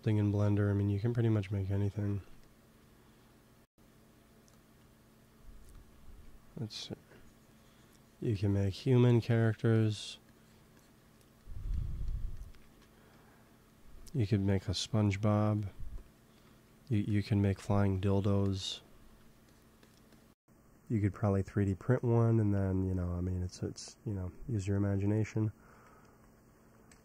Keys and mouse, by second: 4.4-6.4 drag, 6.0 f, 7.0-12.4 drag, 12.5 ctrl+s, 15.5-16.7 drag, 16.4 f, 17.5 f, 20.7-25.1 drag, 24.7 middle click, 25.6-27.0 drag, 25.9 ctrl+s, 26.8 KP_1.